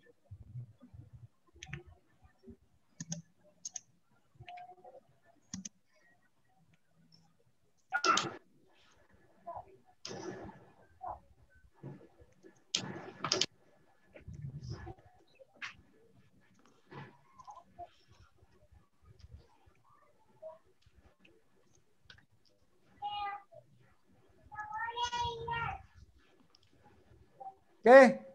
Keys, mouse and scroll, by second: 0.2 click, 2.3 click, 4.2 click, 8.4 click, 12.7 click, 13.4 click, 14.6 click, 16.2 click, 19.5 click, 19.6 click.